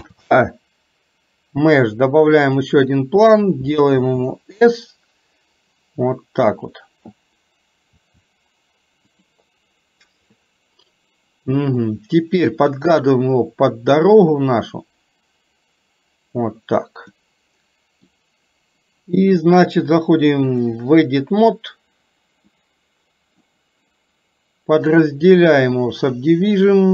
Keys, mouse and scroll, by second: 0.0 shift+a, 4.1 s, 8.0 s, 10.4-11.9 middle drag, 13.2-16.5 drag, 17.3 scroll up 1, 17.4 middle click, 20.5-21.8 drag, 22.5 middle click, 24.9-26.3 right drag.